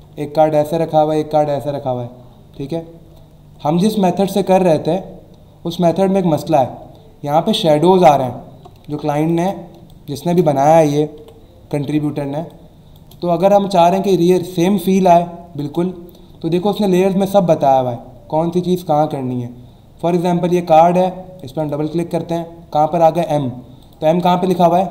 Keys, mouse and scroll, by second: 2.8 alt+Num_Lock, 2.8-3.5 alt+scroll up 1, 5.2 alt+scroll up 1, 6.9-7.3 alt+scroll up 1, 8.4 alt+scroll down 1, 8.8 space, 8.9 click, 9.3 space, 9.8 space, 9.9 click, 10.3 space, 11.2 Escape, 12.1 alt+scroll down 1, 12.4 space, 12.5 click, 12.9 space, 13.6 alt+scroll down 1, 14.0 alt+scroll up 1, 15.0 space, 15.1 click, 15.5 space, 18.6-19.0 scroll down 1, 20.1 click, 21.4 click, 23.8 click, 24.8 alt+scroll down 1.